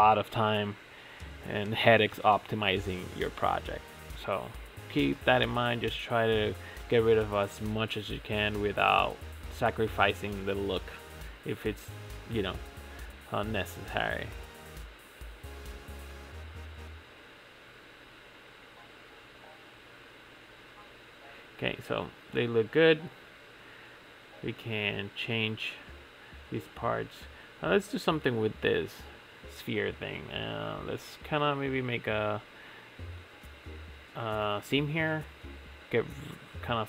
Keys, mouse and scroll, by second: 1.9 alt+click, 2.7 ctrl+x, 3.0-5.1 middle drag, 5.1 ctrl+z, 6.2 ctrl+s, 6.5 ctrl+Tab, 6.8 click, 7.1 scroll down 5, 7.4-10.5 middle drag, 10.6 scroll up 1, 10.7 scroll down 5, 10.9-14.1 shift+middle drag, 14.1 click, 15.0 click, 16.3 click, 17.0 click, 17.6 click, 18.1 click, 18.8 click, 20.3 click, 20.7 click, 22.7 click, 23.0 click, 23.5 click, 24.0 click, 25.6 shift+middle drag, 25.8-26.4 scroll up 8, 26.4-26.8 shift+middle drag, 26.8-27.9 scroll down 3, 27.9 click, 28.2 Tab, 28.5 a, 29.1 middle click, 29.6 click, 31.6 2, 31.9 scroll up 3, 32.2 middle click, 32.6 2, 33.1 alt+click, 33.9 ctrl+e, 36.2-36.8 middle drag.